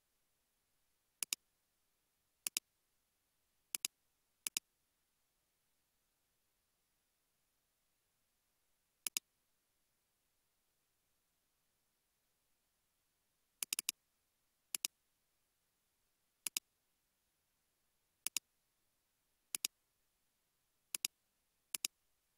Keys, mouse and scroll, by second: 0.1-1.0 scroll up 1, 10.1 space, 10.6 space, 11.8 space, 13.9 double click, 17.1-18.2 scroll up 1.